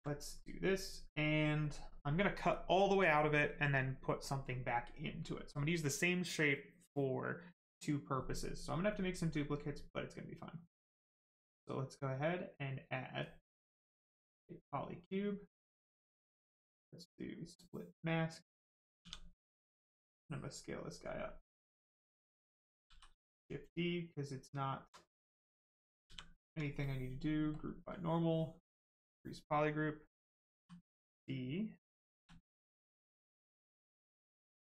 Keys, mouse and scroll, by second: 0.1 right click, 12.4 click, 17.3 click, 18.1 right click, 19.0 shift+w, 19.7 click, 22.9 shift+d, 23.4 right click, 24.7 alt+right click, 26.1 shift+f, 27.5 click, 30.5 d, 30.9 right click, 33.5 click.